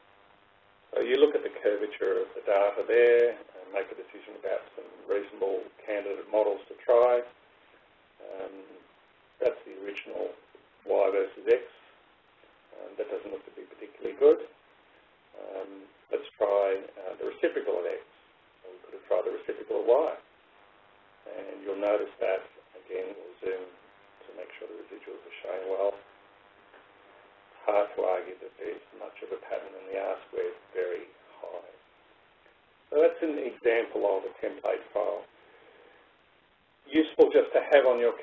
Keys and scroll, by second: 1.7 Left.